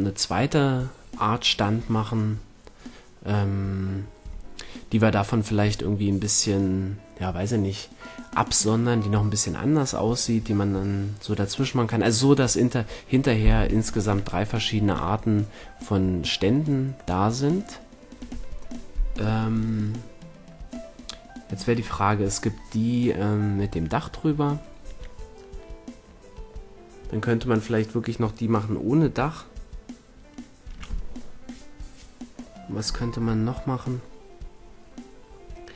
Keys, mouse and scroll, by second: 13.9-19.0 middle drag.